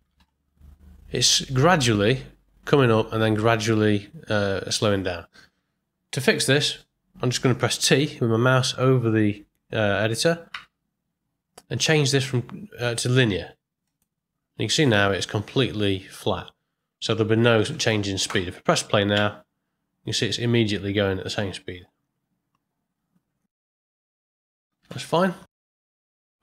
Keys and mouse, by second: 0.1 Home, 10.5 t, 17.6 shift+Left, 19.1 space, 24.3 space, 24.8 shift+Left, 26.1 click.